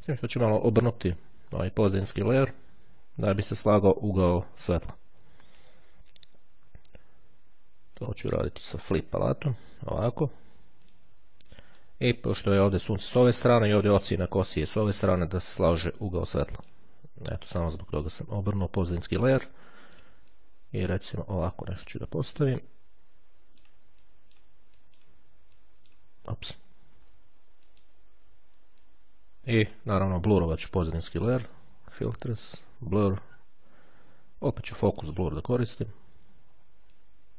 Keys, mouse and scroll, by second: 7.9 click, 8.9 click, 10.9 click, 11.7 click, 12.5 click, 15.5 click, 16.5 click, 17.6-18.9 drag, 19.7 click, 24.2 click, 25.0 click, 25.7 click, 27.1 ctrl+z, 27.9 click, 29.0-30.4 drag, 32.2 click, 34.9 click, 37.1-37.3 drag.